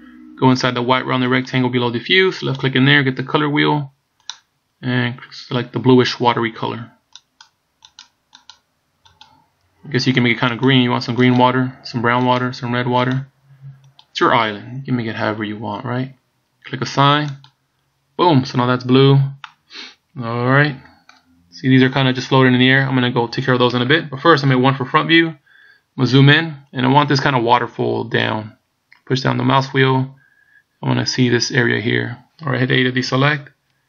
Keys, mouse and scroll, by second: 2.6 click, 17.4 click, 18.8-19.6 scroll down 2, 19.6 middle click, 24.6 KP_1, 25.5-27.7 scroll up 5, 27.7 middle click, 33.2 a.